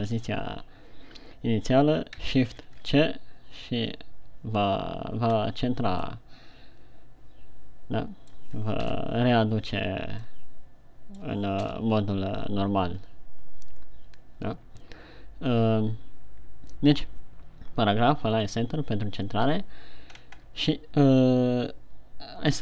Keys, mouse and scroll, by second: 3.1 shift+c, 5.8-6.6 scroll up 1, 6.6 middle click, 9.1 KP_1, 10.7 middle click, 12.0 KP_1, 20.4-20.9 shift+scroll up 3.